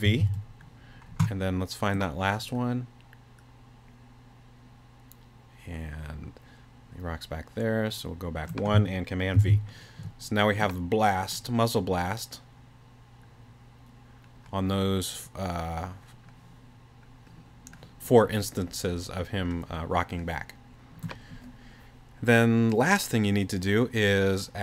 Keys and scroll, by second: 0.0 super+v, 9.4 super+v.